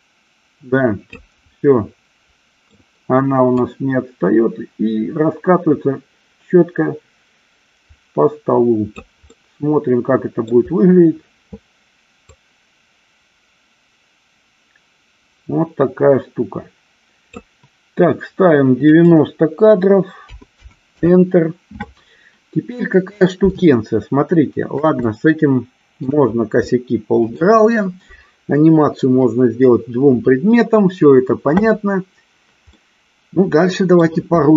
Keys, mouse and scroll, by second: 1.8-3.0 middle drag, 3.9-9.3 drag, 9.6-10.8 middle drag, 12.7-17.6 drag, 19.3-21.4 drag, 23.8-25.0 shift+middle drag, 25.3-26.3 shift+middle drag, 26.9 middle click, 32.9-34.3 middle drag.